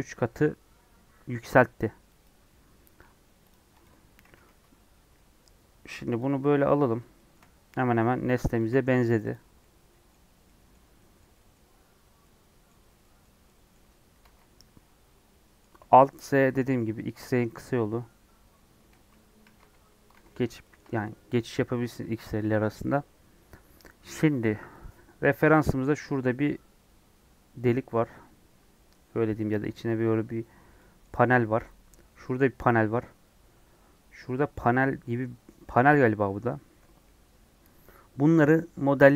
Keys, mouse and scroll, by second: 3.5 click, 3.8 click, 4.3 g, 6.7 scroll up 2, 7.1-9.3 shift+middle drag, 9.3 ctrl+a, 9.6-10.8 middle drag, 10.8 scroll up 1, 10.9-14.2 middle drag, 14.2 alt+z, 14.5-15.8 middle drag, 15.8 alt+z, 16.4 alt+z, 17.5 alt+z, 18.9 alt+z, 19.4 alt+z, 20.1 alt+z, 20.6-39.1 shift+middle drag.